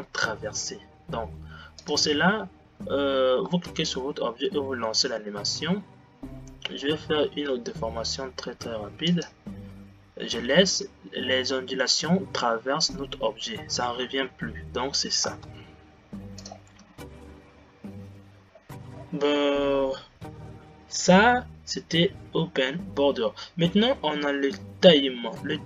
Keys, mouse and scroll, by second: 3.0 click, 3.7 space, 5.0 g, 15.8 space, 16.5-17.6 drag, 18.6 scroll down 5, 19.2-23.8 scroll down 6.